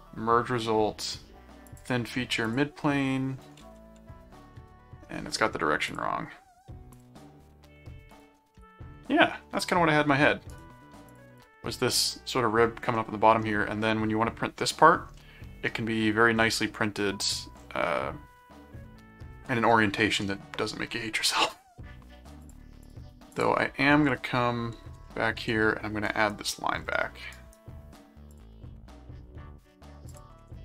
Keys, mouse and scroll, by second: 1.7 click, 2.5 click, 3.8 ctrl+5, 4.5 middle click, 5.8 click, 6.9 click, 8.1 click, 8.5 middle click, 10.5 right click, 11.1 click, 12.9-14.6 middle drag, 15.2 middle click, 16.8 middle click, 22.4 click, 23.9 ctrl+1, 25.0 ctrl+2, 26.1 right click, 27.3 right click, 28.3 click, 30.1 click.